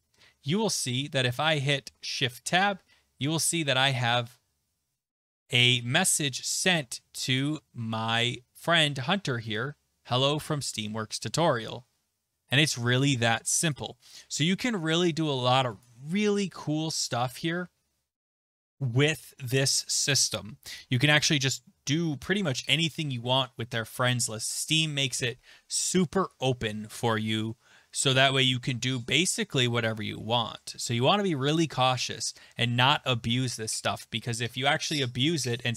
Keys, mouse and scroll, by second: 1.8 Tab, 7.4 click, 13.7 click, 15.8 click, 16.3 Tab, 17.4 click.